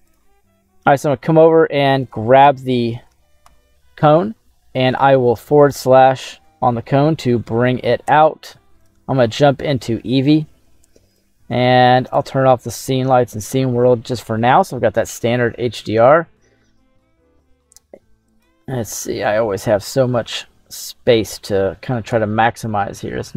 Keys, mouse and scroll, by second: 0.0 right click, 5.0 right click, 5.7 right click, 6.4 /, 7.1 middle click, 8.8 click, 9.4-9.7 scroll down 2, 9.7 middle click, 11.1-12.4 drag, 12.6 middle click, 18.2 click, 18.9 click, 20.7 click, 21.3 click.